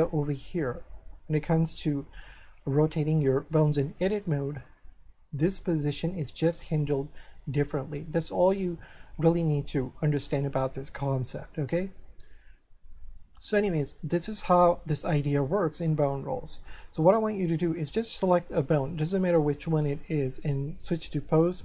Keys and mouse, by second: 12.0 shift+middle click, 15.4 a, 17.8 right click, 20.3 click.